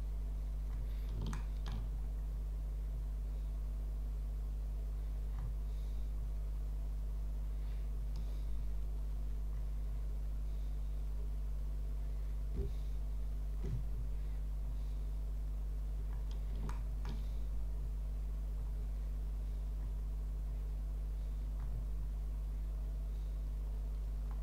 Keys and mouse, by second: 1.3 shift+click, 16.7 shift+click.